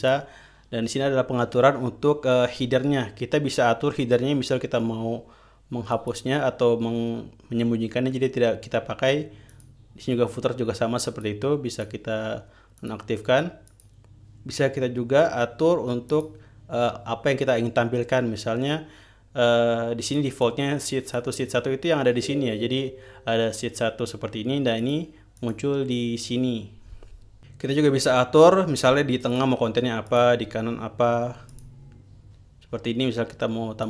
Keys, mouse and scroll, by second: 0.5 click, 6.4 click, 10.0 click, 11.6 click, 12.2 click, 13.3-13.8 drag, 14.2 click, 16.6 click, 20.6 click, 20.9 click, 25.3 click, 25.9 click, 29.9 click, 30.6 click, 32.0 click.